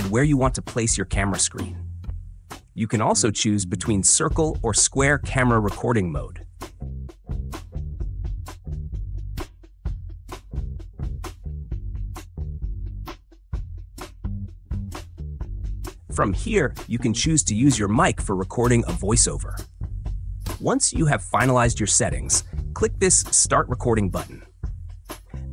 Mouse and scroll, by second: 2.0-4.9 drag, 6.0 click, 15.4-25.5 drag.